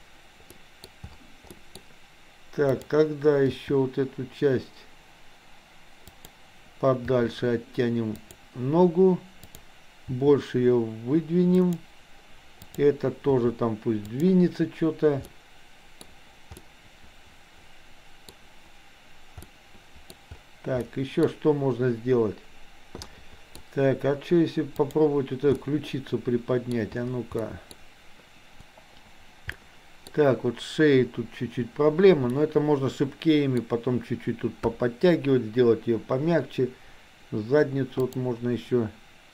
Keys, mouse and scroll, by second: 0.6 middle drag, 1.6 middle click, 1.8-2.7 scroll down 1, 2.7 click, 3.6 g, 7.2 r, 9.3 click, 12.7 click, 13.2 r, 15.3-16.1 middle drag, 16.7-18.2 middle drag, 19.4-20.1 middle drag, 20.8-21.3 middle drag, 23.2-23.6 middle drag, 24.7 click, 25.7-26.7 middle drag, 27.4-27.8 middle drag, 28.6 g, 29.6-29.9 scroll up 1, 29.9 middle click, 30.1-32.4 scroll down 1, 32.4-33.7 scroll up 1, 34.7 KP_1, 38.1 click.